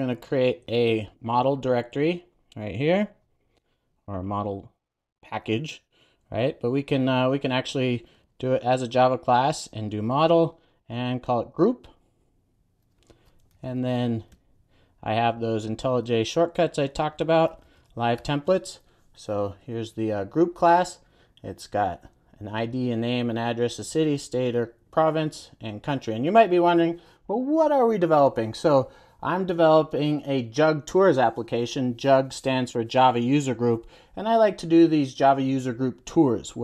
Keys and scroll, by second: 3.0 super+n, 13.4 super+a, 18.5 Return.